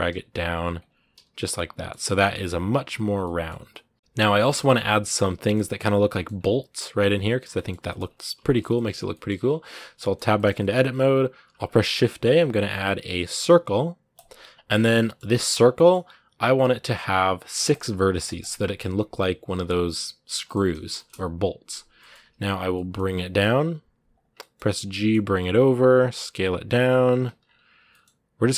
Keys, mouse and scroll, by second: 1.2 scroll down 1, 1.3-5.0 middle drag, 5.0 scroll up 1, 5.2 middle click, 6.1-7.1 scroll up 2, 7.1 scroll down 5, 7.3 middle click, 7.8 scroll up 2, 7.9-9.1 middle drag, 9.1 scroll down 1, 9.4 Tab, 9.7-10.7 scroll up 4, 9.8 middle click, 10.1 shift+middle click, 10.4 middle click, 10.7 a, 14.0 shift+a, 14.5 scroll down 2, 14.7 scroll up 1, 14.7 middle click, 15.1 scroll down 8, 15.5 middle click, 15.9 scroll up 2, 18.2-20.2 drag, 20.2 scroll up 1, 20.2-22.4 middle drag, 22.4 g, 24.2 middle click, 24.6 g, 27.2 scroll up 1, 27.6 g.